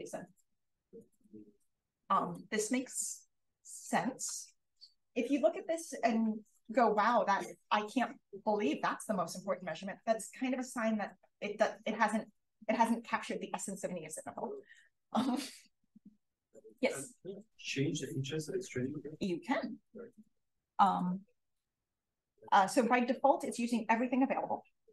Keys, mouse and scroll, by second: 3.8-4.6 scroll up 1, 4.6-9.5 scroll up 1, 9.5-11.2 scroll up 1, 11.2-20.9 scroll up 1.